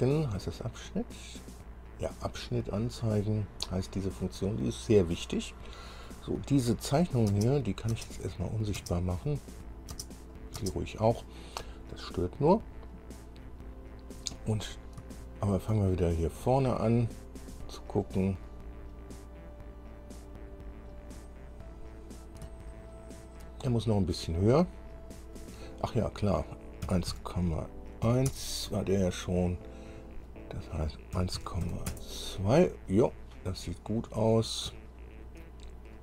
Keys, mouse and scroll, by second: 3.2-3.6 scroll up 1, 4.1 scroll up 1, 7.1 click, 7.5 space, 7.8 click, 8.6 click, 9.0 space, 9.8 click, 10.1 space, 10.5 click, 10.8 space, 12.2-13.2 scroll up 1, 14.3-14.6 scroll down 2, 14.8 scroll down 2, 15.3 shift+middle click, 16.4-16.7 shift+scroll up 3, 17.7 scroll up 2, 18.2 scroll down 2, 18.6-22.8 drag, 22.9 shift+click, 25.5 click, 27.0 KP_1, 27.3 KP_Decimal, 28.2 KP_1, 28.5 KP_Enter, 30.4 click, 31.3 KP_1, 31.6 KP_Decimal, 31.8 KP_2, 32.1 KP_Enter, 33.7 scroll down 2, 35.0 shift+middle click.